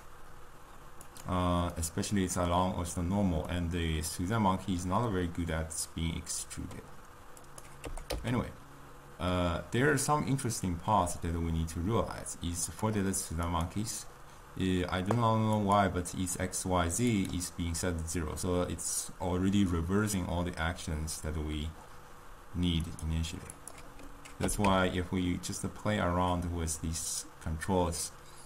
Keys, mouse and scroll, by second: 0.0 click, 1.0 click, 1.8-6.6 middle drag, 7.4 click, 8.3 g, 13.5 click, 17.2 click, 23.0 click, 23.6 click, 24.9 g.